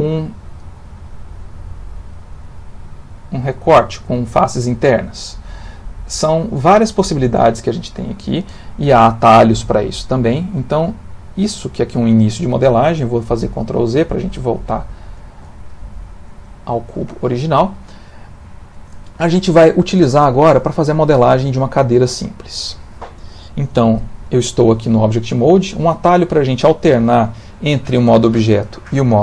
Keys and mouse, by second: 0.6 click, 9.2 middle click, 9.5 middle click, 10.1 middle click, 10.5 middle click, 11.9 middle click, 13.3 ctrl+z, 13.6 ctrl+z, 13.8 ctrl+z, 13.9 ctrl+z, 15.1 ctrl+z, 15.7 middle click, 17.4 Tab, 17.7 middle click, 18.5 ctrl+middle click, 19.1 middle click, 19.6 middle click, 19.7 ctrl+middle click, 20.7 middle click, 20.9 ctrl+middle click.